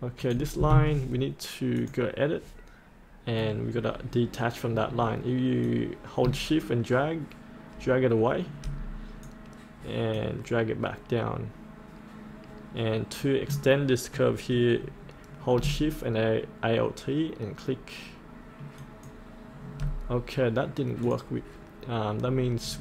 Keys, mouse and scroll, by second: 0.2-13.5 drag, 18.7 alt+shift+click, 22.2-22.6 scroll up 1.